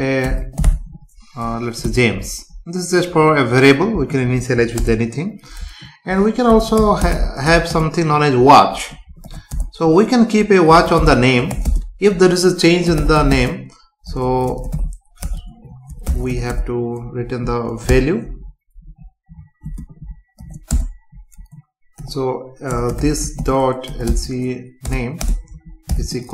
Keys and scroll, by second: 2.1 Right, 3.0 Down, 4.8 Return, 7.7 space, 9.5 Return, 11.6 space, 14.1 BackSpace, 17.9 BackSpace, 18.8 Right, 19.6 space, 20.7 Return, 22.7 BackSpace, 24.9 Return, 25.2 space.